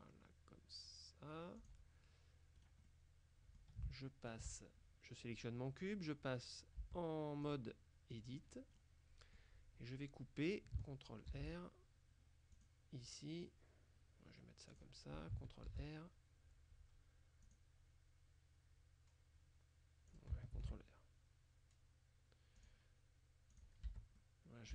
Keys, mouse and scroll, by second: 1.7 click, 2.7 right click, 2.9 click, 3.1 middle click, 3.9 shift+middle click, 6.9 Tab, 7.5 click, 8.2 click, 8.9 middle click, 9.3 click, 11.4 ctrl+r, 12.6 click, 14.8 click, 15.8 ctrl+r, 17.5 click, 20.2 ctrl+click, 20.7 ctrl+r, 22.7 click, 23.6 click, 23.9 Tab, 24.2-24.7 middle drag.